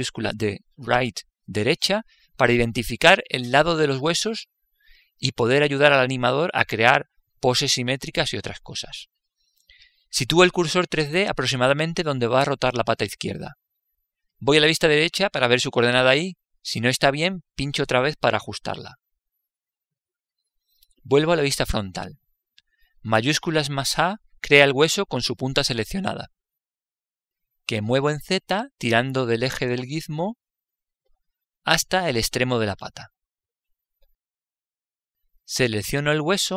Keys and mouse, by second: 14.7 click, 16.3 KP_3, 22.4 KP_1, 24.3 shift+a, 29.2 click.